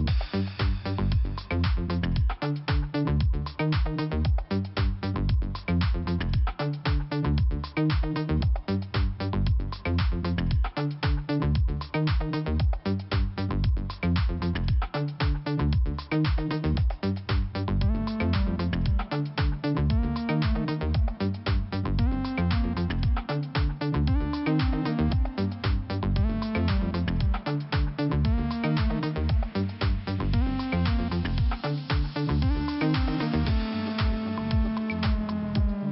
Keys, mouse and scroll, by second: 1.4 click, 2.4 click, 3.9 click, 4.7 click, 6.8 click, 7.9 click, 10.0 click, 10.8 click, 11.6 click, 14.2 click, 17.4 click, 17.5 click, 24.4 scroll down 2, 25.5 scroll up 1, 26.1 click, 27.7 click, 29.6 click, 31.1 click, 33.4 click, 34.3 click, 35.0 click, 35.7 click, 35.8 click.